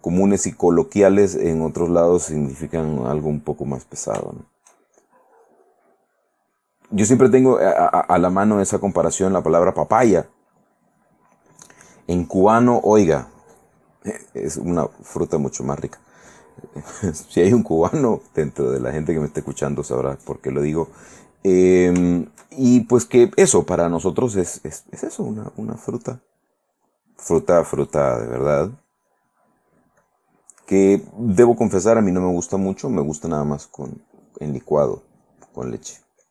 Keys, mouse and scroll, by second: 3.9 click, 4.5 shift+middle click, 5.1-8.8 shift+drag, 10.2 click, 10.9-14.5 drag, 14.8-20.8 drag, 21.0 click, 21.6 middle click, 22.2 shift+middle click, 24.4-26.0 drag, 26.1-27.6 drag, 27.8 click, 29.0 click, 30.0 click, 30.8 click, 31.8 middle click, 32.9 click, 33.4 click, 34.3 click, 34.6-36.3 drag.